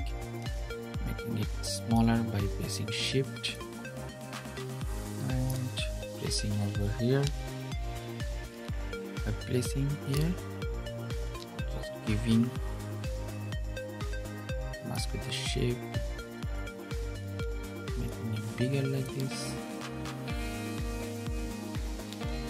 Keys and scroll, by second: 10.9 super+z.